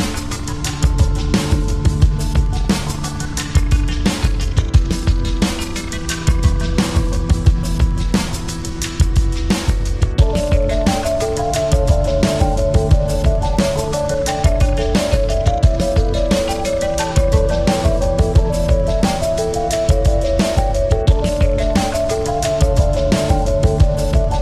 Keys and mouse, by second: 2.3 Up, 2.3 typing, 3.6 typing, 3.8 Up, 7.1-9.0 drag, 9.4-11.3 drag, 10.7 typing, 12.9 click, 12.9 typing, 19.4 click, 19.4 typing, 21.7 click, 21.7 typing, 21.9-23.8 alt+drag.